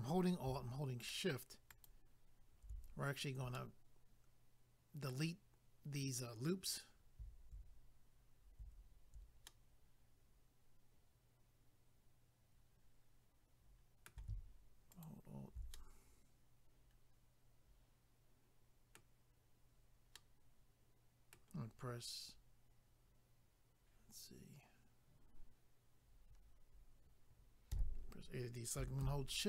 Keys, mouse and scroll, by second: 1.7 alt+click, 3.5 middle click, 9.5 middle click, 14.9 alt+click, 15.0 alt+click, 15.7 middle click, 20.1 middle click, 29.0 a.